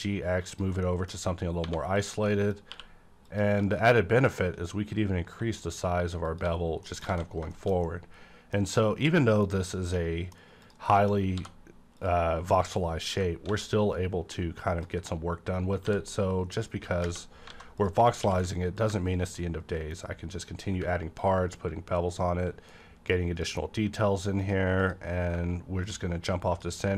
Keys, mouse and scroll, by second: 0.5 click, 0.8 middle click, 1.6-2.0 scroll down 1, 1.6 1, 2.0 click, 2.3 middle click, 2.7 q, 3.3 click, 6.2 shift+click, 6.3 shift+click, 6.5 scroll down 1, 6.8 middle click, 7.1 a, 7.2 scroll down 1, 7.5 middle click, 7.8 scroll down 1, 8.1 middle click, 8.8 scroll down 1, 9.0-10.9 middle drag, 10.6 click, 10.9 shift+middle click, 11.1 scroll up 1, 11.3 d, 12.0 click, 13.1-15.8 ctrl+drag, 13.5 a, 15.8 b, 16.5-17.0 scroll down 1, 17.0 space, 17.5 alt+a, 17.8 click, 18.1 scroll up 1, 18.2 q, 18.8 click, 20.3 click, 21.2-24.4 ctrl+drag, 22.4 x, 24.8-26.9 drag.